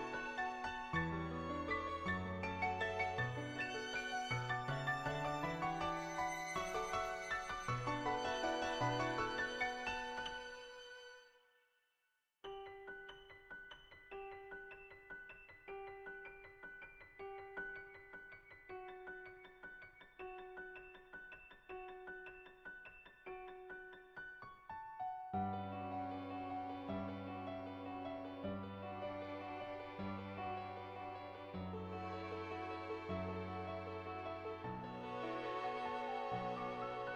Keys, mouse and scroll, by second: 0.3 x, 0.6 Tab, 1.1 middle click, 1.4 shift+middle click, 1.7 shift+middle click, 3.5 middle click, 3.9 middle click, 4.2 shift+middle click, 4.7 shift+middle click, 8.3 Tab, 11.3 n, 11.9 click, 12.9 click, 14.3-16.4 middle drag, 21.4 Tab, 22.9 click, 23.2 ctrl+z, 24.5 click, 25.6 ctrl+z, 25.8-27.5 drag, 27.9 click, 28.2 ctrl+z, 30.3 middle click, 31.9-35.3 drag, 36.0 middle click, 36.9 middle click.